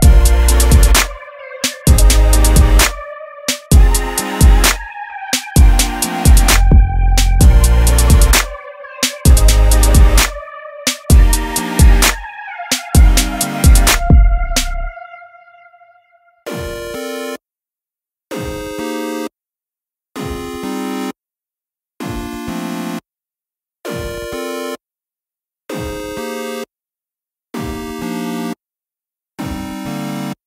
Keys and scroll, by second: 4.7 super+d, 14.4 super+d, 22.5 super+d, 25.0 super+d, 26.0 super+d, 27.1 super+d, 28.3 super+d, 30.1 super+d.